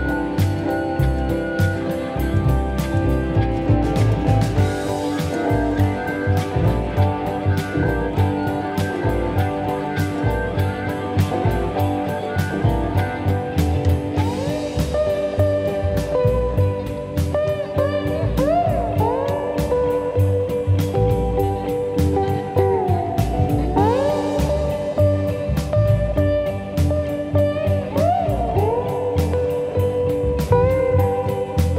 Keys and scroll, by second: 9.3 ctrl+d, 9.5 Escape, 13.2 ctrl+d, 13.3 Escape, 13.6 F1, 24.5 p, 29.3 p.